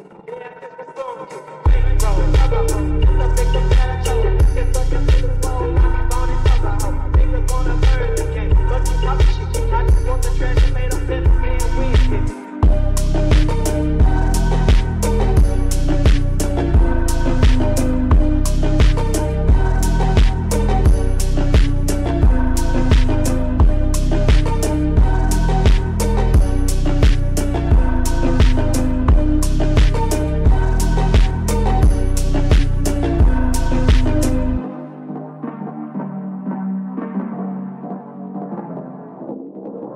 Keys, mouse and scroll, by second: 0.0 right click, 0.4 click, 0.6 click, 1.0 shift+middle click, 1.2-1.7 z, 1.9 Tab, 2.0 middle click, 2.1 scroll down 20, 2.4 scroll up 5, 2.5 scroll down 1, 2.6-3.2 scroll up 10, 3.2 middle click, 3.6 Tab, 4.0 Tab, 4.1 click, 4.2 Tab, 4.3 click, 4.8 middle click, 5.0 e, 5.4 Tab, 5.4 middle click, 6.1 Tab, 6.4-7.9 typing, 8.1 Tab, 8.2-8.8 middle drag, 8.8 Tab, 9.2 g, 10.0 z, 10.1-10.5 z, 10.7 g, 11.6 Tab, 11.7 middle drag, 12.0-12.6 scroll down 9, 12.1 middle drag, 12.6 scroll up 1, 12.7 middle click, 13.6 click, 14.1 shift+a, 16.3-16.7 scroll down 5, 16.7 s, 17.6 g, 18.5-19.4 scroll up 13, 19.4 g, 20.5 s, 22.0 g, 24.4 s, 26.2 g, 30.4 click, 31.3 s, 33.3 s, 37.6-38.7 middle drag, 38.7-39.7 scroll down 1, 39.7 click.